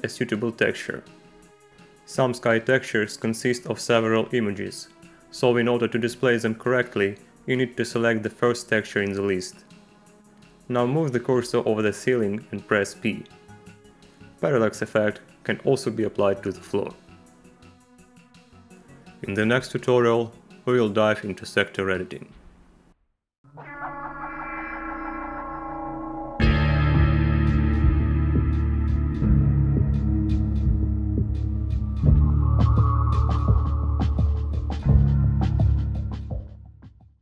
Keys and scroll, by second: 0.0 v, 12.9 p, 16.9 Tab, 18.3 Return.